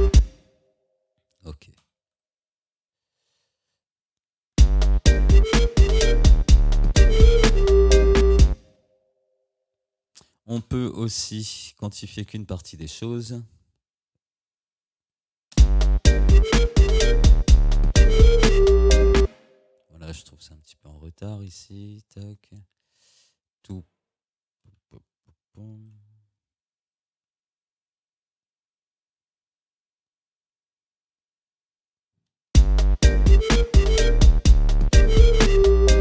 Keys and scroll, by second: 0.2 space, 4.6 space, 8.5 space, 9.8 ctrl+z, 15.6 space, 19.3 space, 32.6 space.